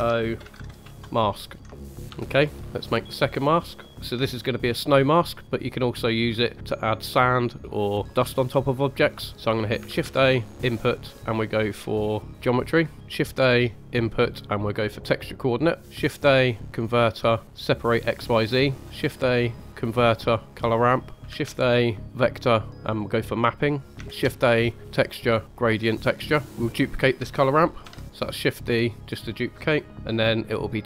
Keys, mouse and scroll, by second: 1.5 middle click, 1.8 ctrl+right click, 2.0 click, 2.0 g, 3.2 middle click, 9.3 middle click, 9.9 shift+a, 12.9 shift+a, 17.6 shift+a, 18.8 shift+a, 21.2 shift+a, 24.0 shift+a, 26.4 click, 27.8 shift+d, 28.9 click, 29.1 middle click.